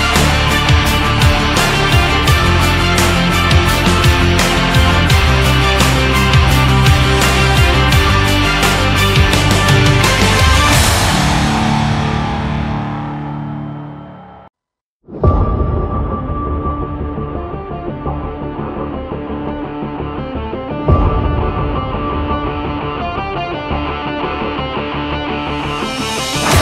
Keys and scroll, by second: 14.4 ctrl+shift+Up, 15.5 ctrl+shift+Down, 16.1 ctrl+shift+Up, 20.7 shift+Up, 21.5 Down.